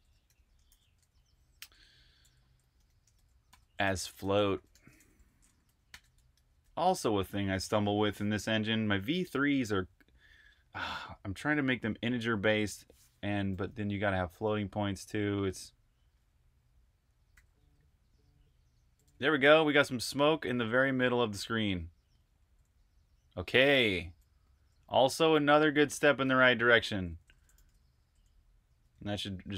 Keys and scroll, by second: 0.0-7.4 typing, 13.8-16.0 typing, 17.2 typing, 18.9-27.9 typing, 29.0-29.5 typing.